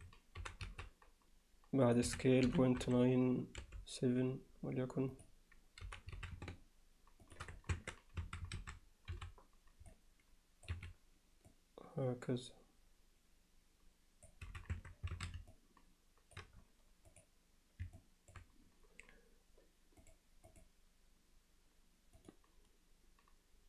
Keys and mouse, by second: 0.4 g, 2.1 s, 5.8 g, 7.7 Tab, 8.2 a, 9.1 c, 11.6-14.3 drag, 14.5 z, 14.8 Tab, 15.2 alt+a, 15.5-16.4 alt+middle drag, 17.2 click, 18.0-18.3 alt+middle drag, 20.6-22.3 drag.